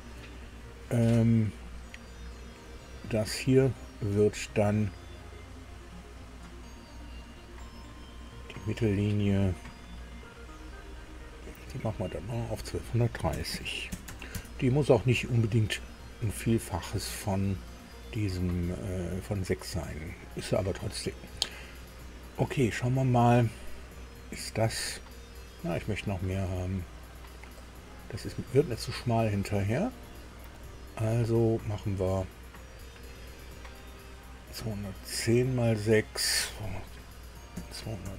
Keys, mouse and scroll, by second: 2.7 click, 10.9 click, 12.0 click, 13.3 KP_1, 13.5 KP_2, 13.9 KP_3, 14.3 KP_Enter, 14.3 KP_0, 23.2 scroll down 2, 27.6 click, 30.4 click, 32.7 click, 34.5 click, 37.5 KP_2, 38.0 Delete.